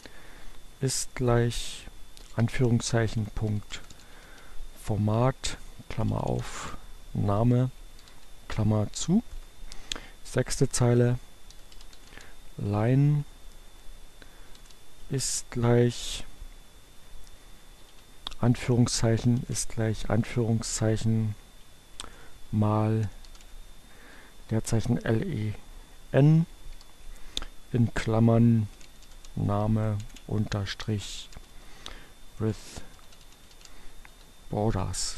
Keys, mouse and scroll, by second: 1.3 shift+2, 1.6 ., 3.0-4.6 typing, 6.0-8.0 typing, 9.0 Return, 11.2-12.3 typing, 14.2 shift+0, 14.3 shift+space, 16.8 shift+2, 19.0-19.9 typing, 21.6-23.3 typing, 26.7 shift+8, 27.3 n, 28.6-34.6 typing.